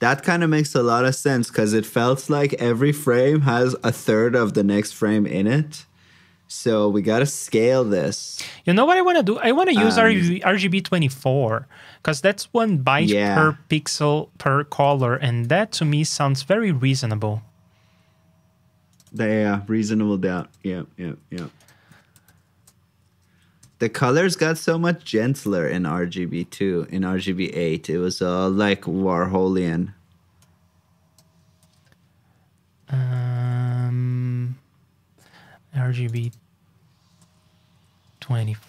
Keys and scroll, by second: 15.4 super+c, 16.0 super+j, 19.3 super+v, 22.1 super+c, 22.5 super+j, 27.2 super+j, 31.6 super+c.